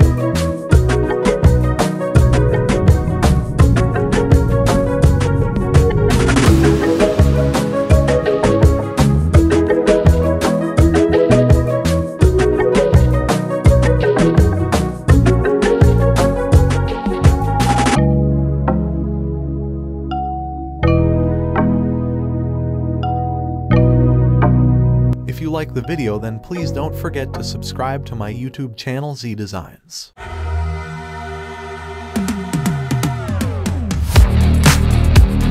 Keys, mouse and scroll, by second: 0.7-2.7 scroll down 1, 3.5-4.4 scroll down 1, 5.9-9.9 drag, 15.8-17.1 scroll down 1, 17.1-18.3 drag, 19.3 t, 20.5 click, 22.2-24.8 typing, 26.5 c, 26.8 click, 28.7-29.1 shift+click, 30.1 t, 31.3 click, 34.0-35.1 alt+scroll up 1.